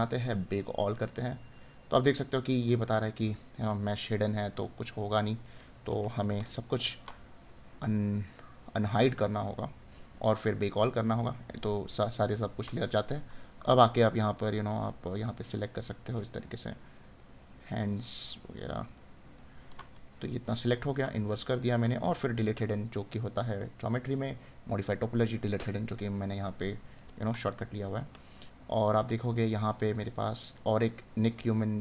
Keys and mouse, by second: 7.5 right click, 12.3 right click, 19.8 right click, 26.9 right click.